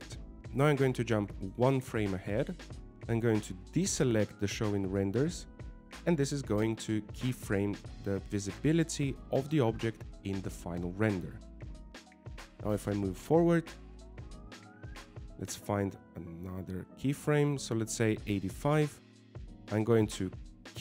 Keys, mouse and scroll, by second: 3.2 click, 5.6 click, 14.0 click.